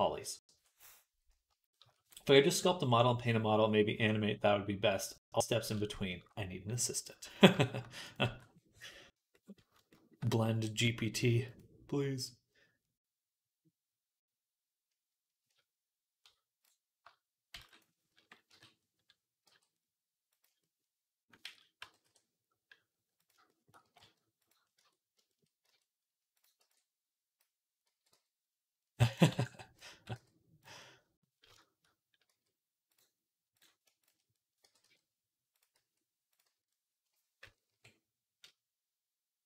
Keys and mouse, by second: 8.0-11.3 middle drag, 8.1 b, 11.3 click, 11.4-19.3 middle drag, 17.4 shift+d, 18.3 KP_3, 19.3 g, 21.3 ctrl+z, 21.6 g, 23.4 ctrl+z, 23.4-33.8 shift+middle drag, 23.7 g, 24.6 Tab, 25.5 z, 26.4 b, 27.7 x, 29.1 b, 29.7 x, 32.1 x, 33.8 click, 34.0-35.6 middle drag, 34.5 g, 35.6 s, 36.3 z, 37.6 KP_3.